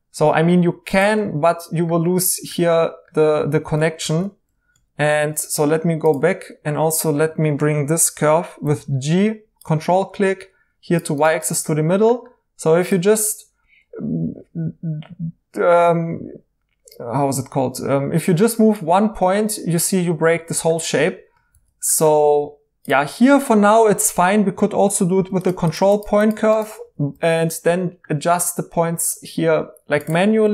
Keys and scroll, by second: 4.0 ctrl+z, 5.0 ctrl+z, 8.6 g, 21.5 ctrl+z, 25.1 f, 26.8 2, 27.1 2, 28.7 1, 30.4 z.